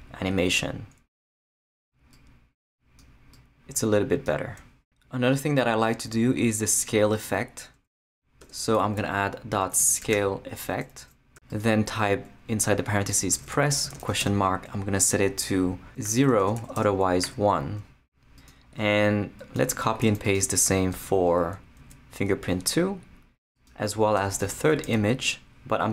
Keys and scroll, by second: 8.0 Return, 8.4 Tab, 9.0-10.6 typing, 10.6 Return, 13.1-17.2 typing, 20.0 shift+super+c, 20.8 super+c, 20.9 super+Return, 21.3 Tab, 21.8 super+v, 24.2 Return, 24.4 Tab, 24.8 super+v.